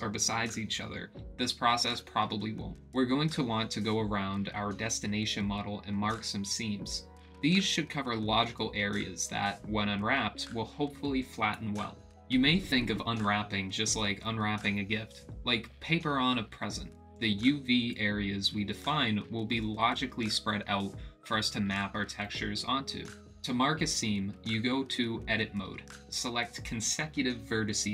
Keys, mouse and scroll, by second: 1.4 click, 3.4 click, 5.2 click, 7.3 click, 9.9-11.0 drag, 13.0 click, 13.4 middle click, 13.8 Tab, 14.1 middle click, 15.8 click, 16.8 click, 17.7 middle click, 19.2 ctrl+click, 20.4 click, 21.7-22.2 middle drag, 23.9 ctrl+click, 24.3 middle click, 25.4 ctrl+z, 25.9-26.6 ctrl+drag, 27.3-27.9 middle drag.